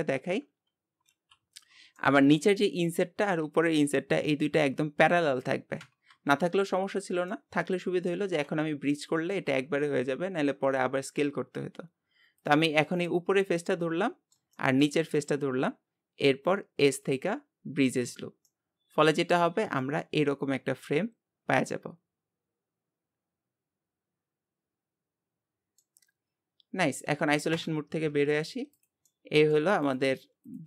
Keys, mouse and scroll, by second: 0.5 KP_7, 1.1 alt+z, 1.7-2.0 scroll up 1, 2.0 shift+middle click, 2.7 scroll up 2, 7.3 middle click, 8.3 alt+z, 8.5 scroll down 2, 8.9 middle click, 9.6 scroll down 2, 12.4 click, 12.7 scroll down 1, 13.1-15.2 middle drag, 15.2-18.5 shift+drag, 18.5 middle click, 19.4 Tab, 19.8-22.9 middle drag, 26.2 scroll down 1, 27.6 KP_Divide, 28.3 scroll down 2, 28.8 click, 29.1 middle click, 29.9 click.